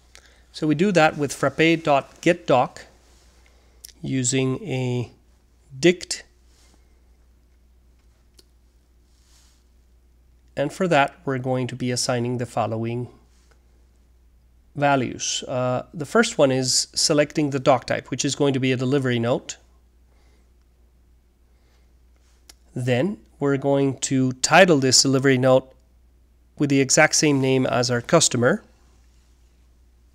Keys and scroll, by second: 0.0-8.0 typing, 12.4 Return, 13.7 Tab, 13.9-16.0 typing, 18.5-22.3 typing, 23.8-30.1 typing.